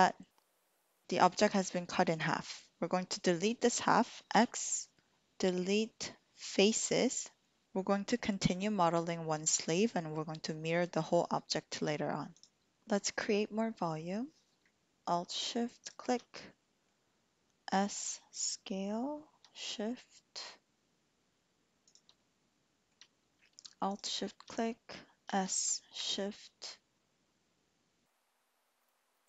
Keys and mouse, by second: 4.3 x, 6.7 typing, 12.3 click, 15.6 alt+shift+click, 16.3 click, 17.7 s, 21.8 shift+click, 22.3 click, 23.8 alt+shift+click, 25.3 s.